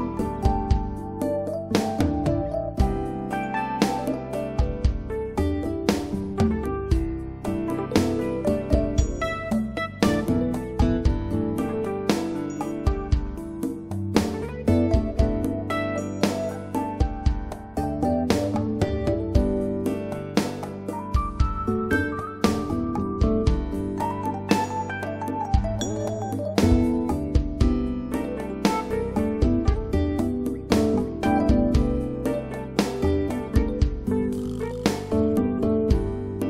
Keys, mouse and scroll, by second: 6.1 right click, 6.4 click, 11.5 click, 12.2 right click, 12.5 click, 14.1 right click, 14.7 click, 23.4 click, 32.9 click, 33.8 right click, 34.1 click, 36.2 click.